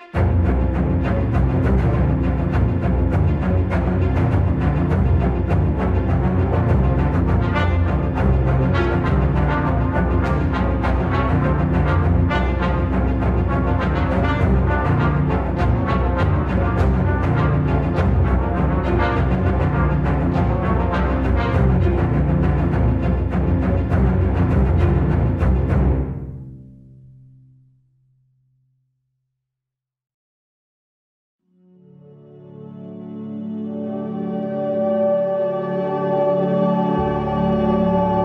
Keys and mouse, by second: 6.9-7.5 middle drag, 9.6 shift+middle click, 13.1 g, 16.8 shift+middle click, 18.3 Tab, 19.0 s, 20.3 s, 25.1-27.2 drag, 28.2-34.7 drag.